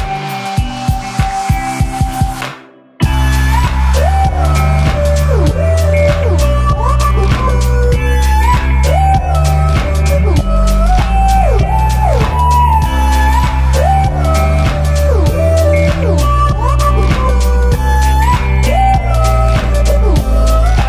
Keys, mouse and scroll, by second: 7.8 alt+scroll down 1, 8.4 alt+scroll down 1, 8.8 v, 9.7 ctrl+t, 11.8-13.0 alt+drag, 14.1 alt+scroll down 1, 15.6 click, 16.3-17.5 alt+click, 17.4 alt+click.